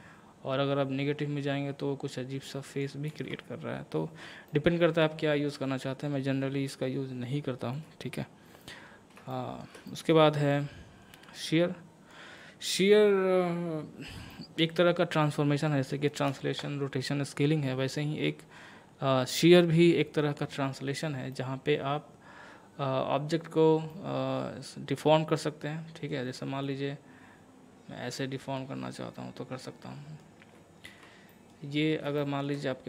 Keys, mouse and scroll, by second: 3.1 ctrl+z, 4.5-7.2 middle drag, 7.2 scroll down 1, 9.3 middle click, 10.5-14.3 drag, 14.3-21.3 middle drag, 21.3-26.6 middle drag, 26.6-30.9 drag, 30.9 ctrl+z, 31.3 middle click, 31.7 scroll down 1, 32.2 shift+middle click.